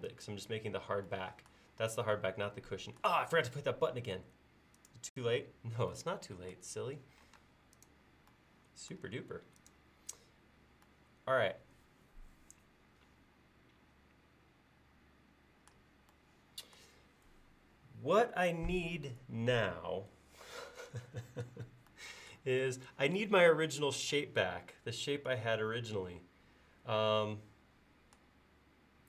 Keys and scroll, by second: 7.4 space.